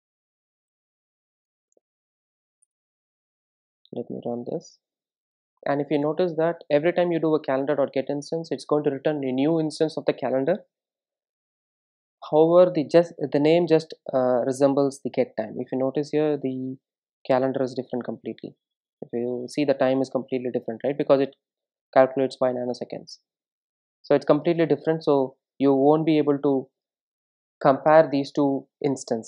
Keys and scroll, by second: 2.6 Tab, 3.4 Return, 5.0 super+r.